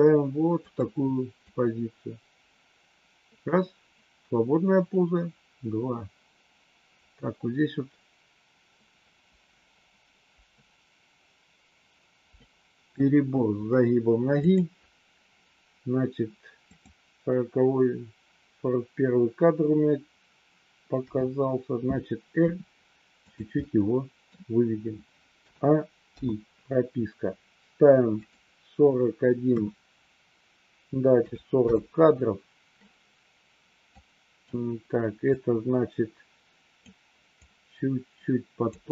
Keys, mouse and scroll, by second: 1.4-12.9 drag, 14.3 click, 16.6 click, 20.9 KP_7, 22.4 r, 23.6 middle click, 25.4 a, 26.0 i, 28.3-32.0 drag, 33.8 click, 35.3-36.9 drag, 37.3-38.6 drag.